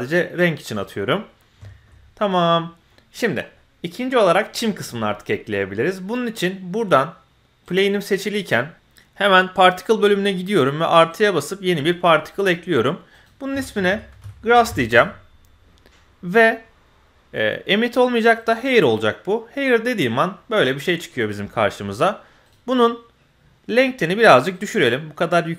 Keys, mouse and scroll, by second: 0.3 middle click, 0.8 click, 1.1 middle drag, 1.6 shift+middle click, 2.0-2.4 scroll up 1, 2.4 middle click, 3.1-3.5 scroll up 1, 3.5-4.3 middle drag, 7.6 click, 8.7 click, 9.5 click, 11.1 click, 13.1-14.9 drag, 14.6 s, 18.4 click, 18.9-20.0 middle drag, 20.0-20.3 scroll down 1, 20.3-21.1 middle drag, 22.4-24.0 drag, 24.5-25.5 drag.